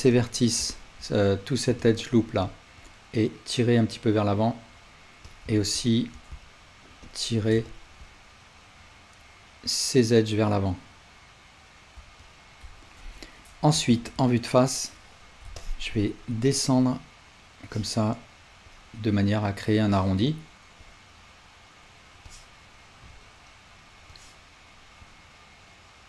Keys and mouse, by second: 0.7-5.3 alt+drag, 7.1 shift+click, 7.6 ctrl+click, 8.8-26.0 drag, 13.9 alt+z.